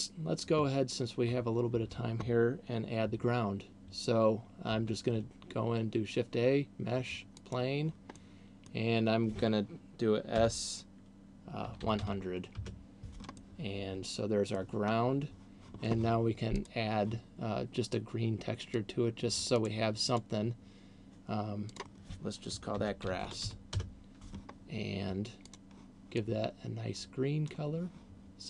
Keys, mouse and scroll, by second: 4.9 shift+a, 8.4 middle click, 10.7 s, 13.7 middle click, 15.4 scroll down 1, 16.7 click, 19.2 click, 20.4 click, 22.2 click, 24.7-25.7 scroll down 3, 25.7 click.